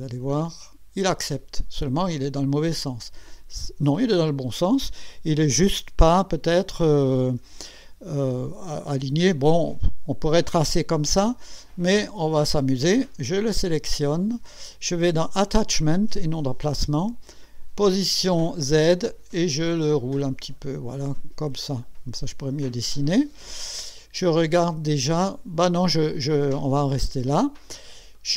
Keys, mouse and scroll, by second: 0.3 click, 1.8-5.2 drag, 7.4 KP_1, 7.9-8.4 scroll up 2, 11.0-11.3 scroll down 2, 13.5 click, 15.8 click, 17.4 click, 18.5 click, 19.1-19.8 scroll down 4, 20.7 scroll up 2, 21.4 scroll down 2, 27.6 click, 28.1-28.3 drag.